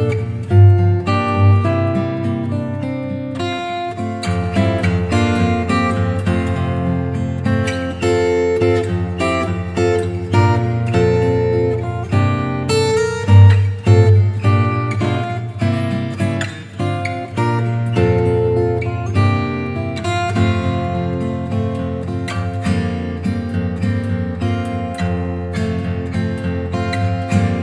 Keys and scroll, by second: 17.3 v, 18.2 i, 20.0 shift+super+n, 20.2 shift+super+Return, 21.0 shift+Return, 21.5 b.